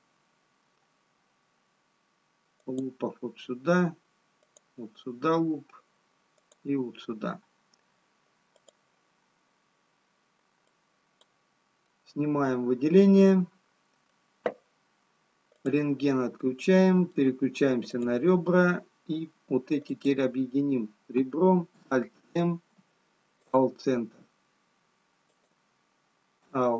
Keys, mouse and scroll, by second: 2.7 click, 5.4 click, 14.7 middle click, 19.0 click, 19.8-20.3 scroll down 1, 20.7 click, 22.6 alt+m, 25.3 click.